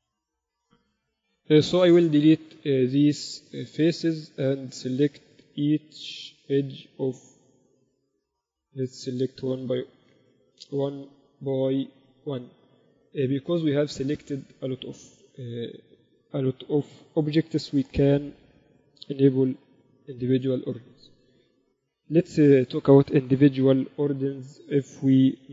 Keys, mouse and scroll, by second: 0.3-1.5 middle drag, 1.5 x, 4.9-6.7 drag, 5.7-9.1 right drag, 8.9-10.6 drag, 9.1 a, 9.6-10.6 right drag, 10.7-14.8 right drag, 10.9 a, 16.3-18.1 drag, 24.1 e.